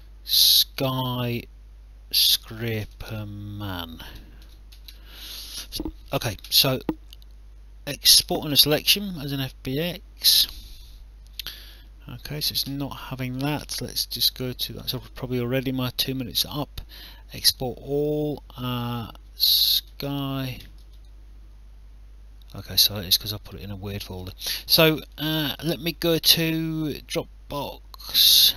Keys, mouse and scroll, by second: 0.4-5.4 typing, 8.1 click, 11.4 click, 13.2 click, 17.5 click, 19.8-21.3 typing, 24.5 click.